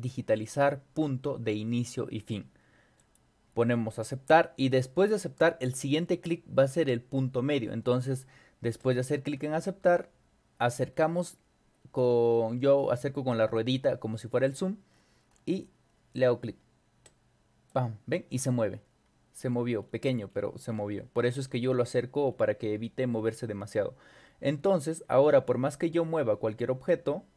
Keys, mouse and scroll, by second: 3.0 click, 8.8 click, 10.9-11.4 scroll up 4, 11.8-12.2 scroll up 4, 12.8-13.4 scroll up 4, 14.4-15.5 scroll up 6, 17.1 click, 19.5-20.1 scroll down 2, 20.3-20.9 scroll down 4, 22.3 scroll down 2, 23.2-24.4 scroll down 6, 24.5 scroll up 2, 24.9-25.6 scroll down 4, 25.9 scroll up 2, 26.9-27.3 drag.